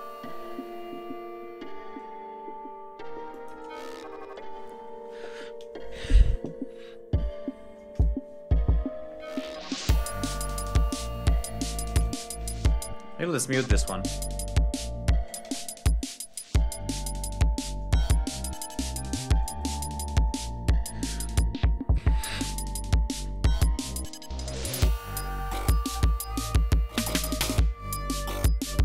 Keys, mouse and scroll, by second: 2.9 click, 7.9 ctrl+scroll up 2, 11.5 alt+click, 11.8 alt+1, 12.6 space, 12.9 click, 14.8 space, 14.9 click, 15.8 click, 16.2 alt+1, 16.8 ctrl+alt+1, 16.9 ctrl+scroll down 2, 17.3 ctrl+scroll up 2, 17.9 ctrl+shift+right click, 18.4 ctrl+shift+scroll down 3, 19.2 shift+right click, 19.5 shift+right click, 21.0-21.4 ctrl+scroll up 3, 21.6-21.9 scroll down 2, 22.2 scroll down 2, 22.4-22.8 scroll up 2, 22.9-23.6 scroll down 4, 23.7 ctrl+scroll up 2, 26.5 scroll up 2, 27.1 scroll down 2, 27.4 ctrl+scroll up 2.